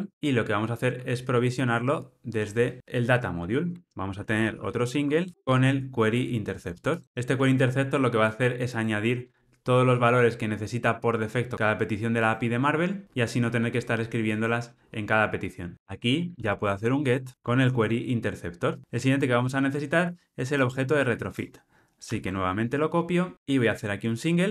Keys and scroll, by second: 0.1 ctrl+alt+o, 0.6 alt+super+[, 5.3 Return, 5.4 Tab, 7.0 super+b, 14.9 alt+super+[, 17.3 Tab, 22.1 super+c.